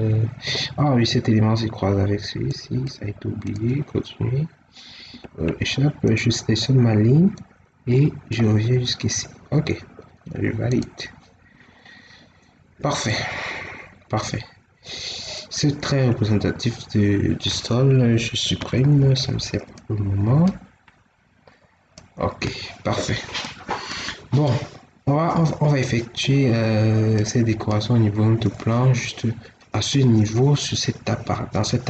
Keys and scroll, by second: 4.9 Escape, 8.8 Escape, 18.7 ctrl+x.